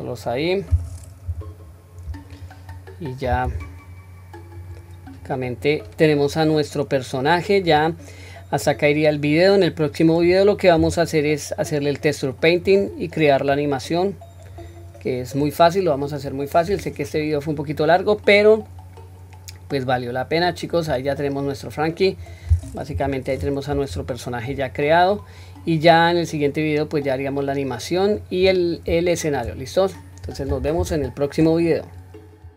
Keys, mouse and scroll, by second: 0.5 middle click, 1.3 KP_1, 1.7-2.4 scroll up 1, 2.4 click, 3.6 s, 5.1 click, 6.4-7.7 drag, 8.7 click, 10.8 s, 13.5 click, 14.9-15.4 scroll down 1, 15.4-16.7 middle drag, 16.9 scroll down 1, 17.3-18.2 middle drag, 18.7-20.7 middle drag, 21.0 click, 21.5-22.0 middle drag, 22.2-23.0 scroll down 1, 23.0-23.7 scroll down 1, 23.0 KP_1, 23.8-24.5 shift+middle drag, 24.7-25.2 scroll down 1, 25.2-28.1 middle drag, 28.4-29.1 scroll up 3, 29.1 shift+middle drag, 29.7-30.5 scroll down 1, 30.7-31.3 shift+middle drag.